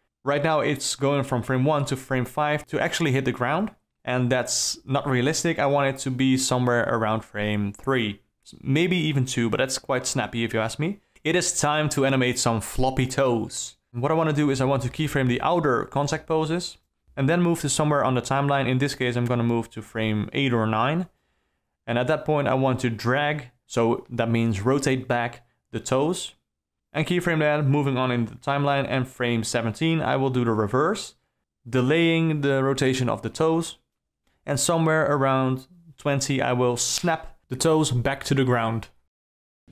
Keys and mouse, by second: 0.3 Down, 1.8 Right, 2.0 Right, 3.4 shift+e, 7.1 i, 8.6 Down, 9.3 Right, 9.5 Right, 9.8 Right, 10.6 Down, 11.1 i, 14.2 shift+Right, 15.1 i, 17.0-18.3 drag, 18.5-18.8 middle drag, 19.5-19.8 middle drag, 20.5-23.3 drag, 23.7 r, 25.8 i, 27.3-28.8 drag, 29.1-29.4 middle drag, 29.6-30.2 middle drag, 30.7 r, 32.9 i, 34.7-37.4 drag, 37.4 alt+r, 37.7 i, 38.8 click, 39.1 g.